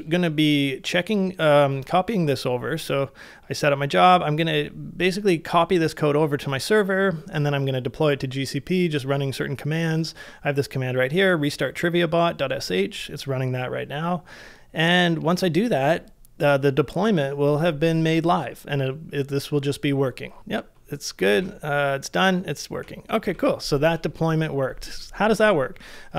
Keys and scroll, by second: 21.3 super+Tab, 25.9-26.1 typing.